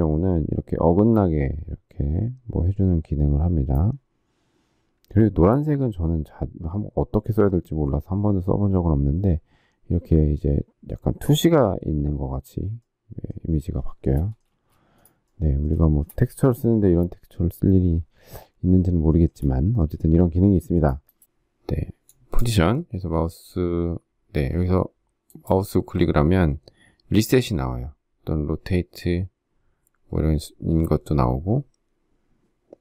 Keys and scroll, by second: 14.4 shift+space.